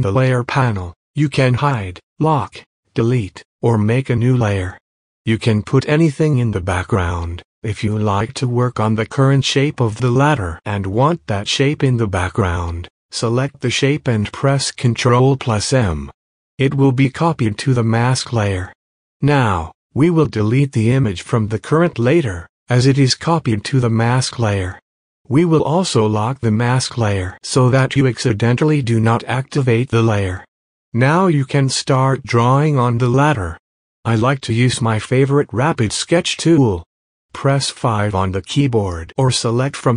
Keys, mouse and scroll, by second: 27.1 typing, 27.8 scroll up 1, 36.7 click, 38.9 click.